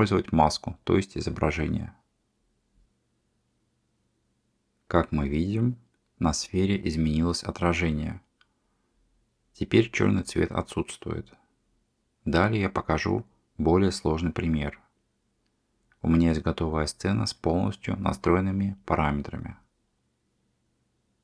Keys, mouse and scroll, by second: 1.4 click, 1.8 g, 3.8 middle click, 5.2-7.2 middle drag, 8.7 shift+click, 9.3 middle click, 10.1 shift+d, 15.3 click, 16.5 shift+d, 19.6 click.